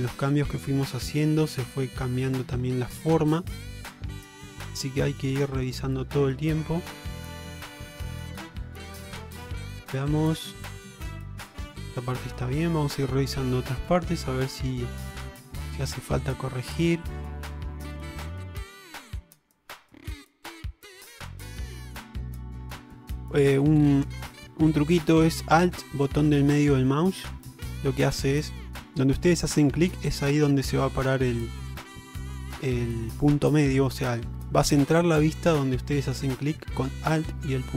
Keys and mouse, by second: 0.1 click, 1.2 shift+middle click, 2.0 shift+middle click, 2.7 shift+middle click, 3.8 shift+middle click, 4.8 shift+middle click, 6.4 shift+middle click, 7.5 shift+middle click, 8.4 middle click, 9.2 alt+z, 9.5-11.6 middle drag, 12.0 middle click, 12.7 alt+z, 13.3 middle click, 13.9 shift+middle click, 15.2 shift+middle click, 16.9 shift+middle click, 17.6 shift+middle click, 18.3 shift+middle click, 19.4 shift+middle click, 20.3 ctrl+middle click, 21.3 shift+middle click, 23.5 shift+middle click, 24.4 shift+middle click, 27.1 alt+middle click, 37.3 alt+middle click.